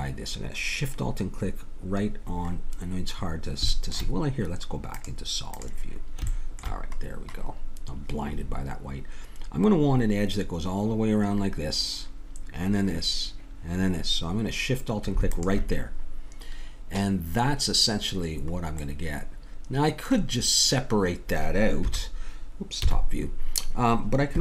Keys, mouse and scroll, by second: 2.4-4.1 middle drag, 4.9-6.9 drag, 15.3-17.2 drag, 18.0-20.6 middle drag, 21.9 KP_1, 22.8 KP_7.